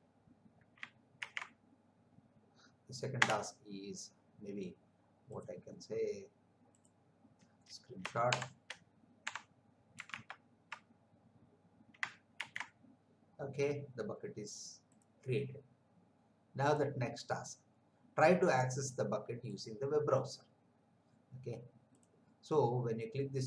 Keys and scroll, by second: 1.2 ctrl+v, 3.2 Return, 8.3 shift+Print, 9.3 Print, 10.2 alt+Tab, 12.3 ctrl+v.